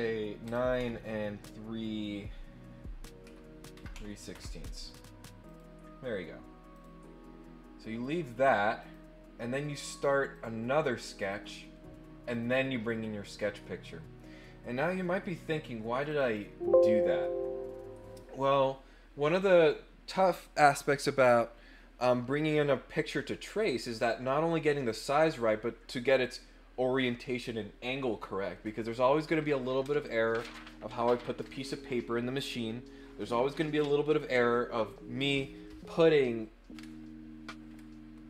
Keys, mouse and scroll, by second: 5.4 click, 6.7 click, 8.8 click, 10.3 click, 11.2 click, 12.3 click, 16.0 click, 16.2 click.